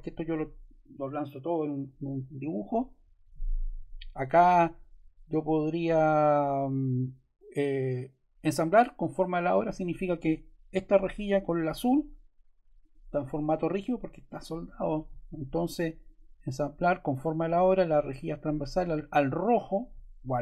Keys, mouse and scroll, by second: 5.5 click, 9.3 click, 18.1 click.